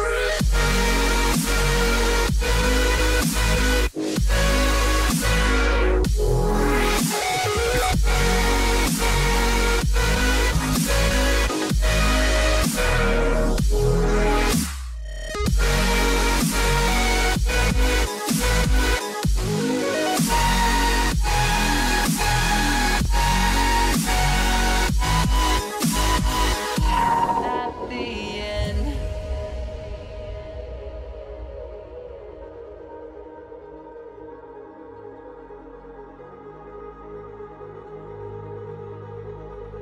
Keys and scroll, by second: 0.8 ], 5.0 ], 9.4 [, 13.6 ], 22.8 Return, 23.4 ], 27.2 [, 29.4 h, 31.7 o, 32.4 ], 39.7 [.